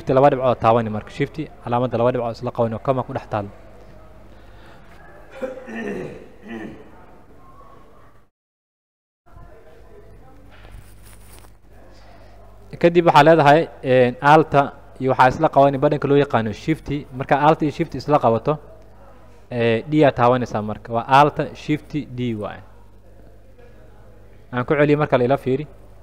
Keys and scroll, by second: 0.4 shift+,, 14.3 space, 20.3 alt+shift+d, 25.8 ctrl+z.